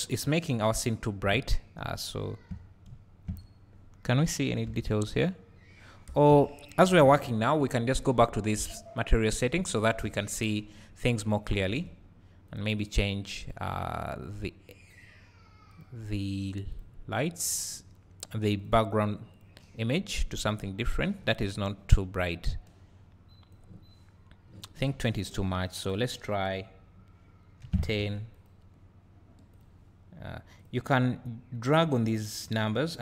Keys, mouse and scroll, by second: 1.6 scroll up 2, 1.8 `, 2.6 scroll down 2, 2.9 `, 3.3-3.7 scroll up 2, 4.1 scroll up 1, 4.7 KP_Divide, 5.6 scroll up 1, 6.3 KP_Divide, 7.6 ctrl+s, 8.6 click, 9.4 scroll down 1, 10.0 KP_0, 11.9 ctrl+s, 12.5-28.5 drag, 20.2 `, 21.4 scroll up 1, 23.9-25.1 scroll up 2, 25.1-28.3 scroll up 1, 30.6 click, 32.3-33.0 drag.